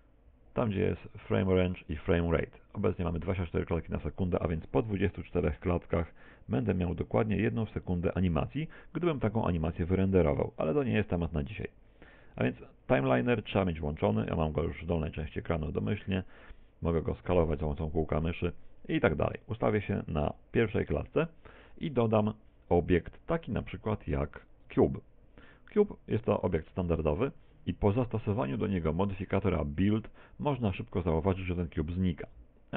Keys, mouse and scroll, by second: 13.8 click, 15.8 click, 16.8 click, 19.8 middle click, 19.8 click, 19.8 scroll up 2, 22.6 middle click, 23.4 shift+a, 26.4 middle click, 27.6 middle click, 32.0 click.